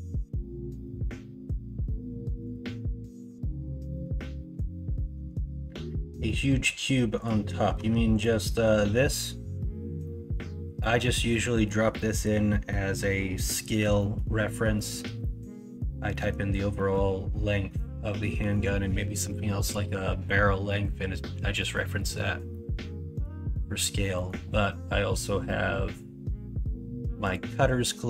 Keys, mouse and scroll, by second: 3.3 middle click, 4.7-5.1 middle drag, 6.2 middle drag, 7.7 Tab, 10.0-10.8 middle drag, 11.6 middle click, 11.8 middle drag, 12.4 middle drag, 13.9 middle drag, 14.7 middle drag, 15.2 middle drag, 16.1 middle drag, 16.7 middle click, 18.4 middle click, 20.7 middle drag, 21.6 middle click, 21.9 middle click, 22.5-23.2 middle drag, 24.1 middle click, 27.8-28.0 middle drag.